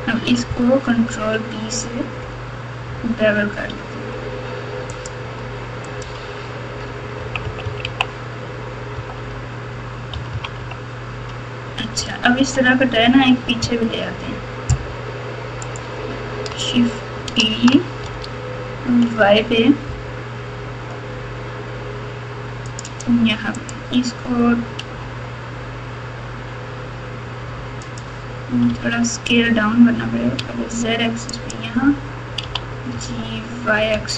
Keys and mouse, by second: 1.1 ctrl+b, 5.8 click, 6.2 Tab, 7.1 KP_2, 7.4 KP_2, 7.6 KP_2, 7.8 KP_2, 8.9-10.5 typing, 12.0 KP_Subtract, 12.5 KP_Subtract, 13.6 KP_Subtract, 14.1 KP_Subtract, 14.2 KP_Subtract, 15.6 click, 18.1 shift+d, 23.5-25.0 drag, 25.0 r, 28.7 g, 32.4 g.